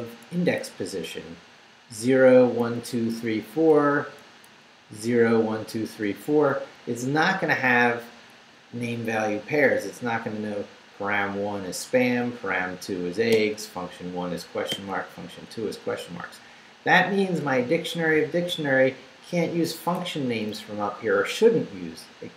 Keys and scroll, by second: 2.2 Right, 4.5 Down, 5.2 Right, 8.2 Left, 12.0 Right, 13.3 Right, 14.7 Right, 15.9 Left, 20.3 Up.